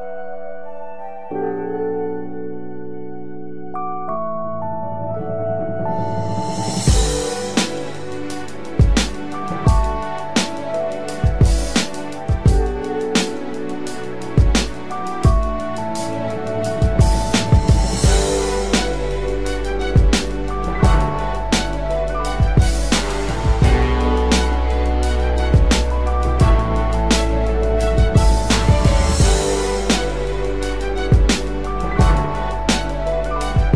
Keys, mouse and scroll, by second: 27.0 double click, 28.5 ].